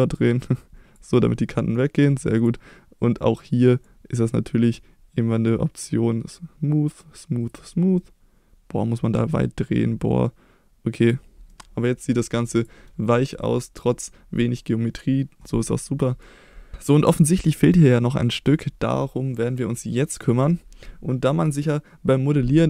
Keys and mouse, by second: 1.5 middle drag, 2.4 click, 4.0-11.1 drag, 11.5-12.0 middle drag, 12.6 click, 13.6 middle click, 15.9 middle click, 16.9 middle click.